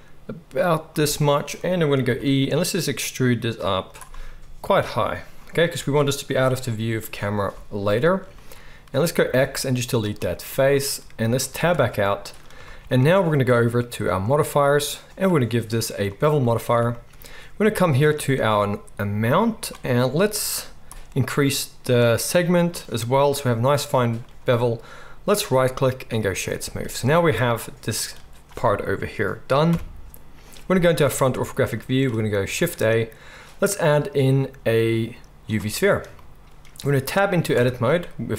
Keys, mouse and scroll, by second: 2.0 e, 9.2 x, 11.5 Tab, 14.0 click, 14.2-15.1 middle drag, 15.1-25.2 drag, 25.2-31.3 middle drag, 29.6 KP_1, 32.5 shift+a, 37.5 Tab.